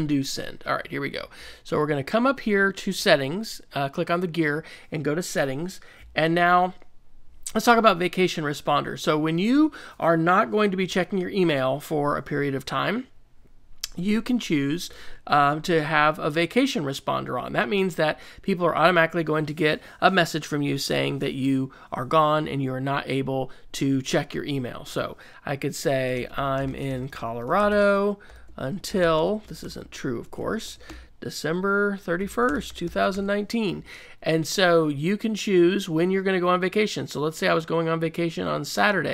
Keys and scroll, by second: 26.1-33.6 typing.